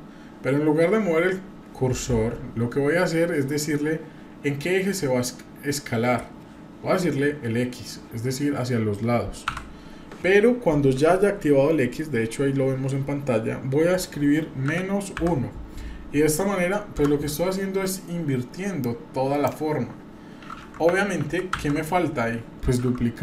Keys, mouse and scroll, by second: 18.8 click, 21.2 ctrl+z, 21.5 ctrl+z.